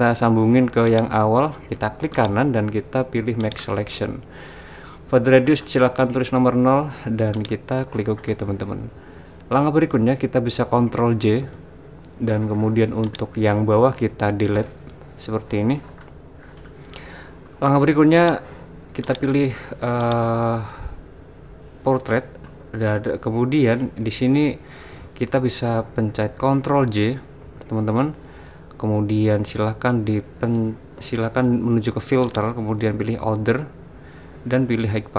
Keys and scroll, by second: 11.4 super+j, 14.6 BackSpace, 27.4 super+j.